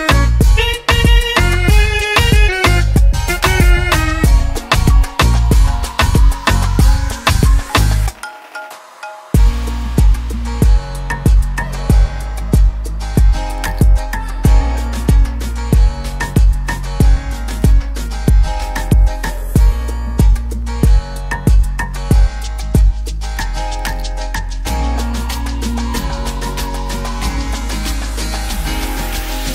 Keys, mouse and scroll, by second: 0.7 Return, 0.9 click, 5.2 click, 6.7 click, 7.7 BackSpace, 8.8-9.1 typing, 10.9-12.8 typing, 13.3 Return, 14.9 Return, 15.0 click, 18.9 click, 20.7-21.4 BackSpace, 21.6 Return, 23.3 Return, 23.5 click, 24.9 click.